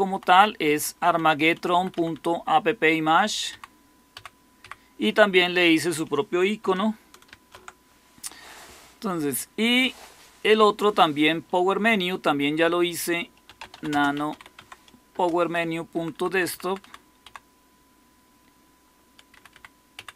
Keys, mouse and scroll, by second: 0.0 Right, 1.7 Right, 1.9 Right, 2.0-2.9 Right, 3.4 Down, 4.1 Down, 4.5 Up, 7.2 ctrl+x, 13.1-14.7 typing, 15.0 Return, 15.9 Down, 16.1 Down, 16.2 Down, 16.4 Down, 16.6 Down, 16.7 Down, 17.2 Down, 19.2 Up, 19.4 Up, 19.9 Down.